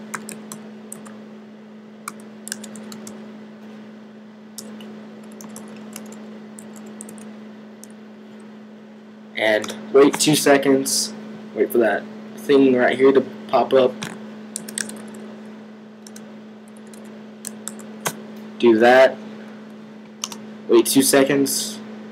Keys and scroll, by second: 0.0-3.4 typing, 4.4-7.5 typing, 14.2-18.0 typing.